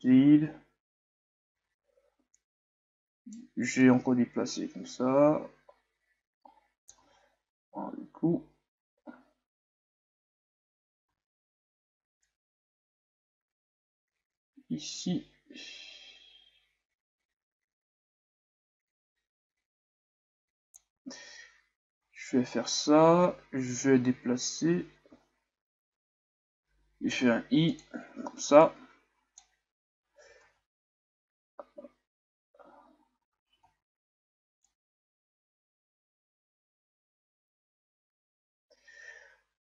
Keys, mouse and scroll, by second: 1.6 alt+a, 2.3-4.0 right drag, 4.0-6.8 drag, 7.0 alt+a, 11.1 alt+a, 12.4-15.5 drag, 21.3-23.6 scroll up 2, 23.6-25.4 scroll up 1, 25.4-26.1 scroll up 1, 28.8-30.5 drag, 30.5 alt+a, 34.8-37.7 drag.